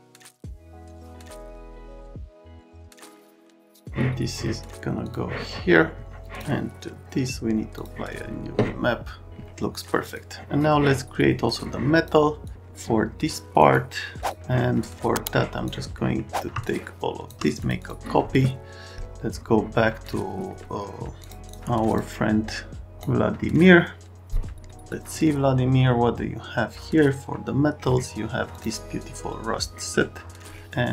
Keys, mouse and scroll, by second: 0.1 click, 0.4 click, 0.8 click, 1.0 click, 1.4 click, 2.2 click, 2.8 click, 3.1 KP_1, 3.2 KP_2, 3.6 click, 5.0 click, 6.2 click, 7.7 click, 10.0 click, 11.5 click, 12.4 click, 13.6 scroll down 1, 14.2 click, 15.2 click, 15.9 right click, 16.6 click, 17.6 click, 17.8 click, 21.2 click, 21.5 click.